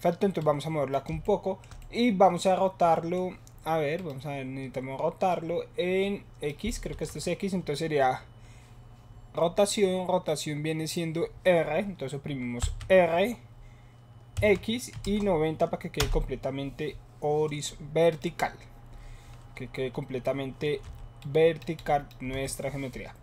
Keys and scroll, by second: 6.9 ctrl+z, 12.6 r, 14.9 KP_9, 15.0 KP_0, 15.9 Return, 20.9 7.